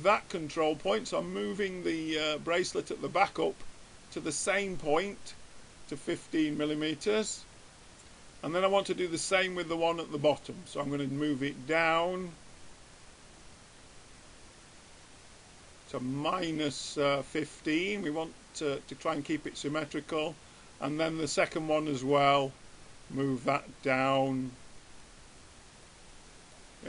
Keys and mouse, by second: 0.2-1.7 drag, 9.0-10.8 drag, 11.4-12.8 drag, 15.8 middle click, 20.6-23.6 drag, 26.2-26.8 middle drag.